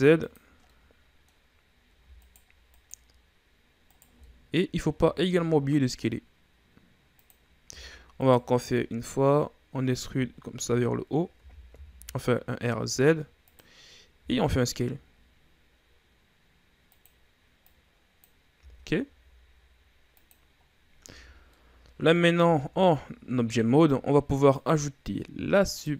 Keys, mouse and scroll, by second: 1.2-2.8 middle drag, 2.8 alt+right click, 3.3 alt+right click, 4.4 alt+right click, 4.7 scroll up 1, 4.8 middle click, 5.4 s, 8.2 e, 9.6-10.9 drag, 10.9-11.9 scroll up 1, 11.9 r, 14.7 s, 18.2 click, 19.1 s, 21.2-21.6 scroll down 2, 21.6 Tab, 21.9 scroll down 1, 22.1-23.1 middle drag, 23.1-23.6 shift+scroll down 2, 23.6-25.1 scroll up 4, 25.1-25.9 drag.